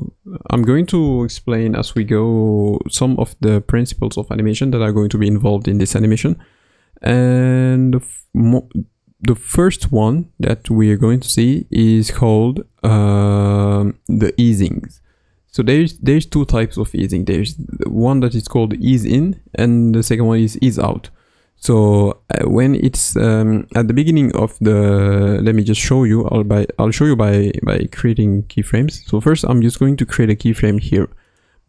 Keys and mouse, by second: 23.7 middle click, 26.5-27.0 middle drag, 26.5 KP_1, 31.2 click.